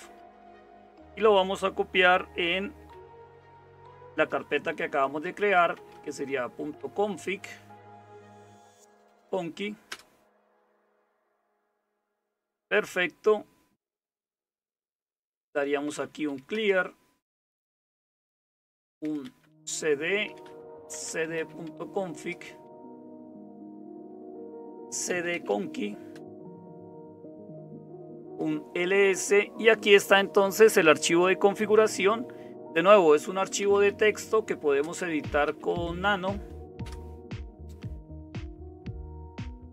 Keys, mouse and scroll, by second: 0.0-39.7 typing, 36.8 Return, 39.6 Down.